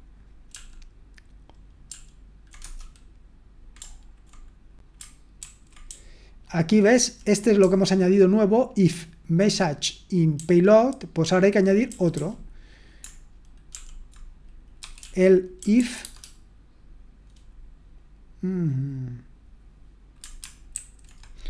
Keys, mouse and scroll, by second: 0.5 ctrl+p, 1.9 ctrl+p, 2.6 Return, 5.4 ctrl+d, 5.8-7.6 typing, 11.0-12.1 typing, 13.7-16.2 typing, 20.7 ctrl+alt+v.